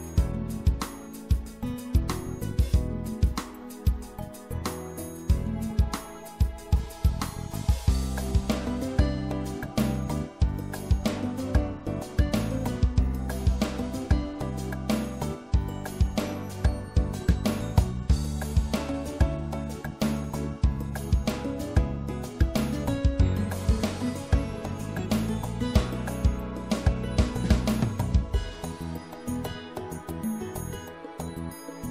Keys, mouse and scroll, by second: 1.4 middle click, 1.7 middle click, 2.0 middle click, 2.9-4.6 drag, 6.4 e, 7.2 s, 10.7-12.4 drag, 13.6-14.9 middle drag, 15.0-20.0 middle drag, 20.0 click, 20.6 middle click, 21.2 middle click, 21.4-23.3 drag, 23.3 middle click, 24.4 right click, 24.8 middle click, 26.6 e, 27.7-29.8 drag.